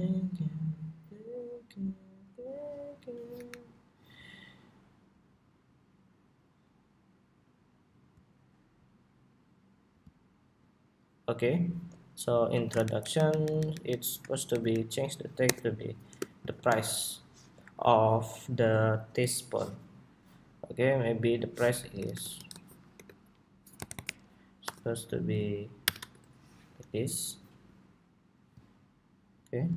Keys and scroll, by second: 3.2 alt+Up, 26.5 Escape.